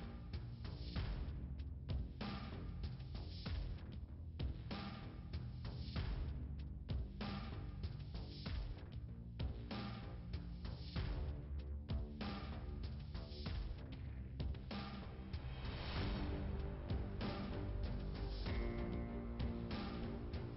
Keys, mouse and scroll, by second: 0.0 click, 5.0 click, 7.3 click, 9.5 click, 10.7 click, 11.6 click, 11.8 click, 14.7 click, 16.9 click.